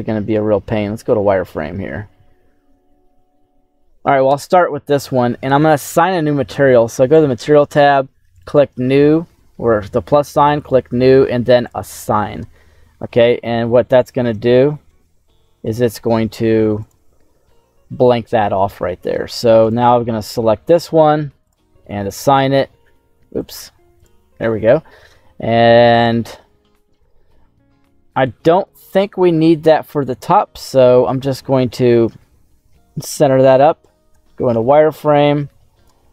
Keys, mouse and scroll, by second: 0.4-0.9 scroll down 2, 1.0 z, 1.7-2.2 scroll down 2, 2.2-3.9 middle drag, 8.2 click, 10.5 click, 11.6 click, 14.3 z, 14.8 z, 15.5 middle click, 16.0 z, 17.2 middle click, 18.4 middle click, 19.3 z, 19.5 right click, 21.4 click, 23.3 click, 24.4 middle click, 25.4-25.8 scroll down 2, 25.8 shift+middle click, 27.5 middle click, 28.6 shift+middle click, 33.1 KP_1, 34.0 z, 34.5 shift+middle click, 35.2 shift+click.